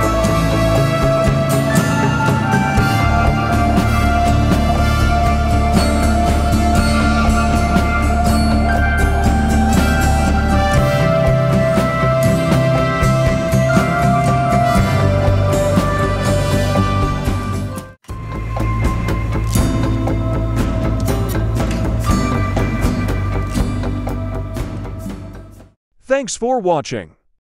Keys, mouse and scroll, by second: 1.8-5.9 drag, 6.2 right click, 7.0 click, 11.3 ctrl+2, 11.8 click, 12.7 right click, 13.4 click, 18.9 typing, 19.8-21.8 alt+shift+drag, 22.2 scroll down 1, 22.6-25.5 typing, 23.2 click.